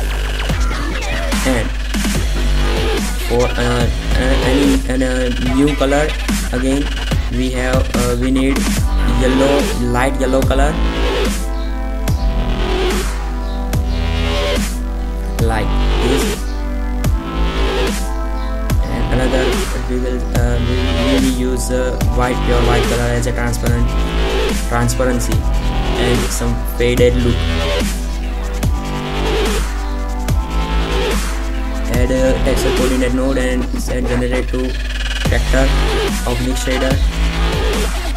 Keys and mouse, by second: 4.9-8.4 drag, 12.1-13.9 drag, 19.6 shift+z, 22.6 shift+a, 30.4-32.2 drag.